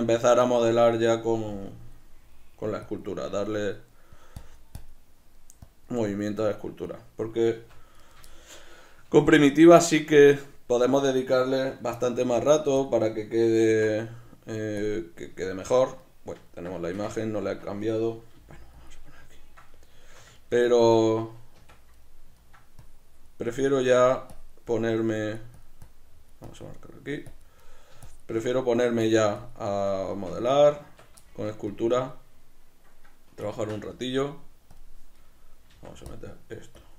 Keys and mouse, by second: 0.0 click, 0.7-2.9 middle drag, 1.7 KP_Decimal, 2.9 click, 3.3 middle click, 4.1 click, 5.1 middle click, 5.7 click, 6.4 middle click, 6.9 click, 7.6 b, 7.7 Tab, 7.7 click, 8.0 right click, 8.3-12.9 shift+middle drag, 9.1 alt+q, 12.2 shift+d, 12.9 click, 13.7 alt+q, 15.4-18.9 shift+middle drag, 18.4 g, 18.9 click, 19.0-22.8 middle drag, 21.6 Tab, 22.8 click, 24.7 middle click, 25.2 click, 26.7 middle click, 27.3 click, 27.6 middle click, 28.1 shift+click, 28.5 middle click, 29.1 click, 29.8 middle click, 30.1 b, 30.3 Tab, 30.5 right click, 30.8 Tab, 31.0 b, 31.3 shift+middle click, 31.7 click, 32.1-34.7 middle drag, 33.5 ctrl+z, 34.7 click, 35.2 middle click, 36.1 click.